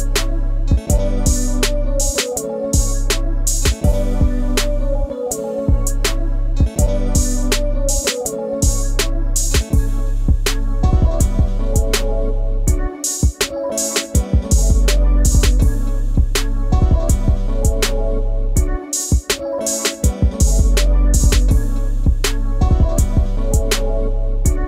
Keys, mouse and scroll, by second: 0.9 shift+a, 3.7 s, 6.6-7.4 scroll up 5, 7.4-10.5 middle drag, 12.5 click, 13.3 scroll up 2, 14.1-15.4 shift+middle drag, 15.4-24.6 drag.